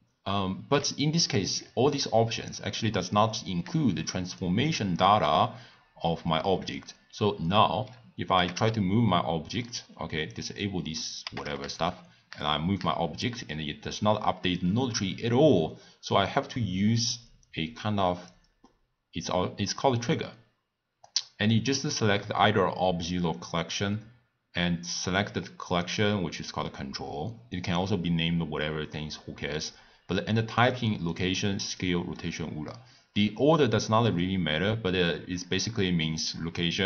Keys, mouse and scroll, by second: 4.3 click, 4.9-7.9 drag, 8.3 g, 10.3 click, 11.2 g, 17.4-20.6 drag, 21.1 click, 21.7-23.4 drag, 25.7 click, 27.5 click, 30.6-33.7 drag.